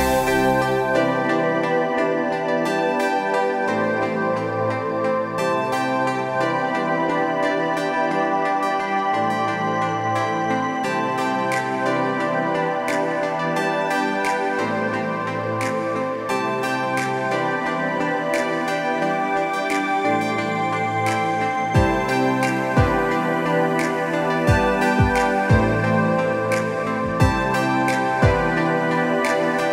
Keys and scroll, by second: 0.0 Delete, 2.7 space, 3.9 space, 7.2 b, 18.5 space, 20.2 ctrl+KP_Subtract, 20.4 ctrl+KP_Subtract, 20.5 ctrl+KP_Subtract, 21.2 t.